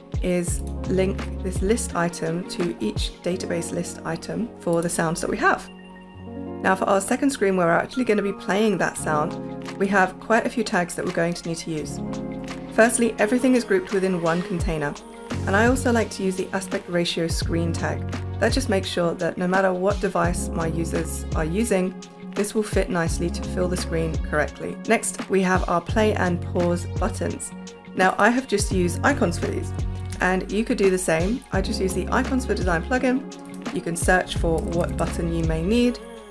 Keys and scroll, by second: 30.1 super+p, 34.3-35.5 typing.